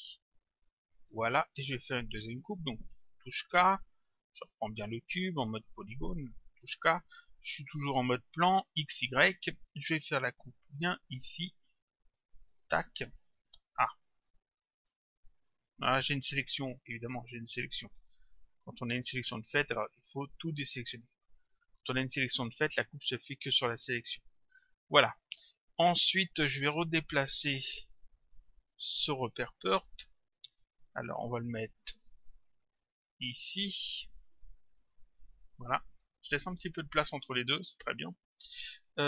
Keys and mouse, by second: 3.0 k, 4.4 click, 5.7 click, 6.7 k, 12.2 click, 14.8 click, 17.8 click, 20.9 click, 24.0 click, 26.7 click, 28.7 click, 31.9 click.